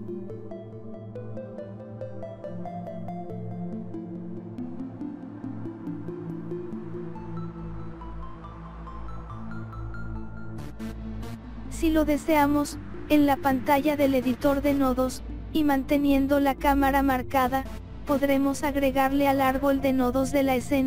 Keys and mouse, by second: 1.2 click, 2.0 click, 2.9 click, 3.5 click, 7.9 i, 8.5 i, 8.9 click, 14.7-16.2 drag, 17.2 click, 18.6 click, 19.5 click, 20.5 click.